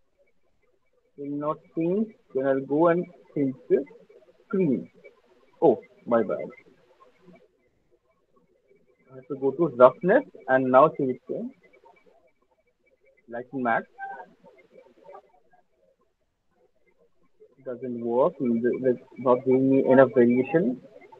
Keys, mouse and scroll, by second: 0.1 click, 0.5 click, 3.4 click, 6.2 ctrl+z, 6.9 ctrl+z, 7.3 ctrl+z, 7.7 ctrl+z, 8.9 click, 9.9 click, 11.2 click, 13.3 click, 14.4 alt+click, 14.8 click, 15.3 click, 15.9 click, 16.1 alt+click, 16.2 click, 16.5 alt+click, 16.6 click, 17.1 click, 21.0 click.